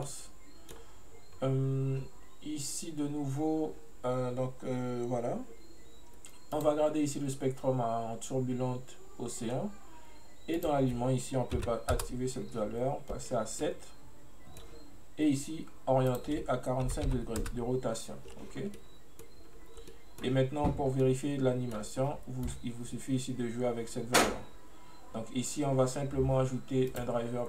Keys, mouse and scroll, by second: 1.4-4.4 scroll up 1, 6.6-9.6 drag, 10.6-13.7 drag, 13.7-16.2 middle drag, 16.2-18.6 drag, 18.6 scroll down 1, 18.8-19.5 middle drag, 19.5-20.0 scroll up 2, 20.0 middle click, 21.0 scroll down 1, 21.1-22.5 middle drag, 22.5-25.5 drag.